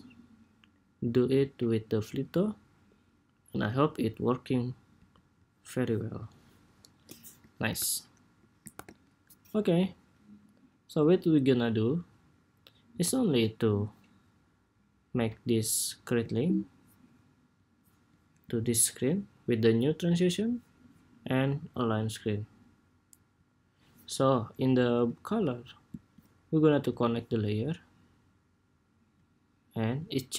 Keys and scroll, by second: 8.5 super+=.